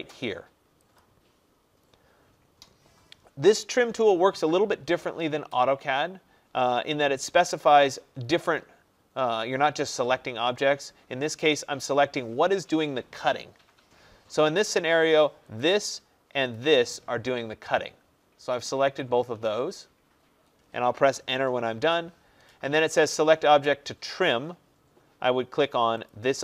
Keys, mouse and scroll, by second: 1.0-6.1 drag, 15.7 click, 16.6 click, 21.8 Return, 26.1 click.